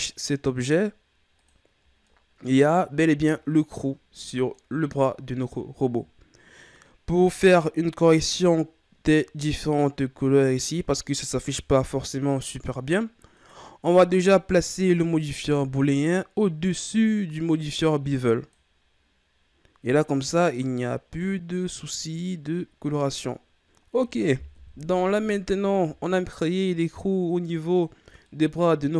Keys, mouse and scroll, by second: 1.3 click, 2.0-8.1 middle drag, 8.1-8.5 scroll up 2, 13.3 right click, 15.3-18.5 drag, 20.6-23.6 middle drag, 23.8-24.5 scroll down 2, 24.5 KP_1, 25.5-26.3 ctrl+scroll down 5, 26.3-26.9 scroll down 2, 26.9-28.9 middle drag.